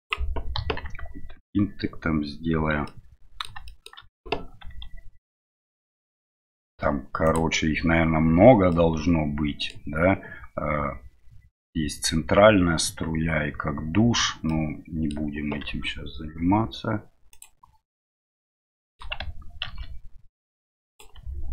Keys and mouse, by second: 0.5 KP_1, 2.9 middle click, 3.7 shift+middle click, 7.2 s, 8.7-9.7 middle drag, 14.6 middle click, 18.1 middle click, 18.8 shift+middle click.